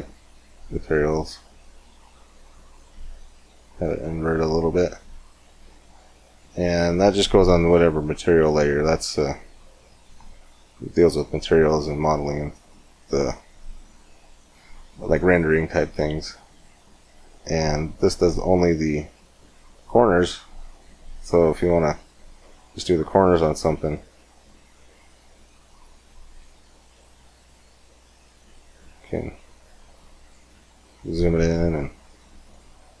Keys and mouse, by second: 4.5-18.1 drag, 18.1-19.3 middle drag, 23.2-24.3 middle drag, 24.3-26.2 drag, 26.2-27.3 middle drag, 27.3-30.7 drag, 30.7 middle click, 31.2-33.0 drag.